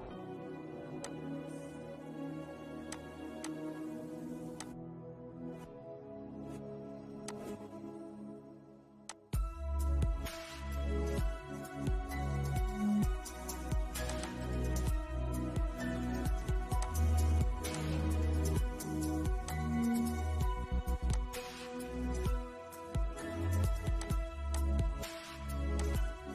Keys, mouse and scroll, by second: 9.3-13.3 shift+middle drag, 13.3 click, 14.5 scroll down 1, 14.8-16.3 middle drag, 21.5-21.8 scroll down 1, 21.8-23.2 shift+middle drag, 23.2-26.3 drag.